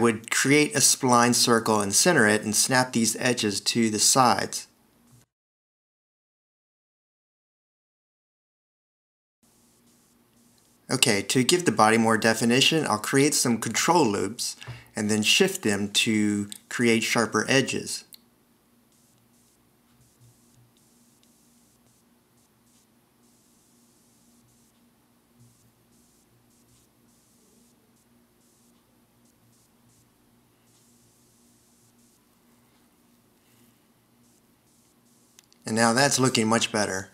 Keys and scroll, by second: 0.4 shift+super+i, 2.7 0, 4.2 shift+super+i, 10.4 Return, 10.7 0, 11.5 v, 12.2 alt+e, 12.7 c, 14.2 alt+e, 15.4 alt+r, 15.5 shift+x, 16.2 alt+e, 21.3 alt+r, 21.4 shift+x, 22.2 alt+e, 24.7 alt+r, 24.8 shift+x, 25.3 alt+e, 26.0 alt+r, 26.2 shift+x, 26.7 alt+e, 27.4 v, 28.1 alt+r, 28.2 shift+x, 28.6 alt+e, 29.6 c, 31.6 alt+e, 34.3 Escape.